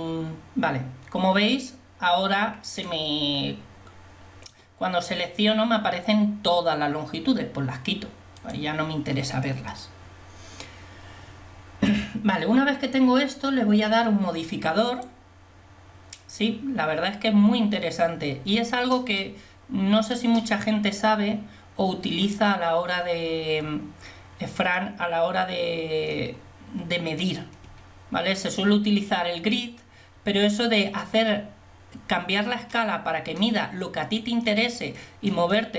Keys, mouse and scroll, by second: 8.5-13.1 drag, 14.9-17.6 drag.